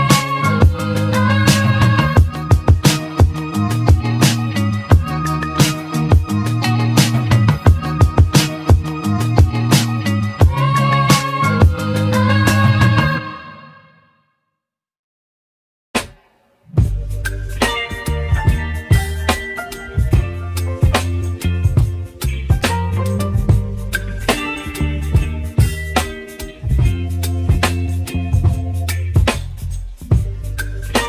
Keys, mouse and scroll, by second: 0.4-1.3 scroll down 1, 1.3 click, 3.3 click, 4.6 shift+click, 6.2 shift+click, 7.1 shift+click, 7.7 shift+click, 8.7 shift+click, 9.7 shift+click, 10.7 shift+click, 11.5 shift+click, 12.7 shift+click, 14.2 shift+drag, 14.7 shift+click, 16.1 ctrl+p, 16.9 ctrl+p, 18.0 click, 18.9-21.4 scroll down 1, 21.7-22.3 scroll down 1, 22.3-23.1 scroll up 4, 23.1 ctrl+z, 23.5-24.5 scroll down 3, 25.6-26.8 shift+middle drag, 26.8 shift+d.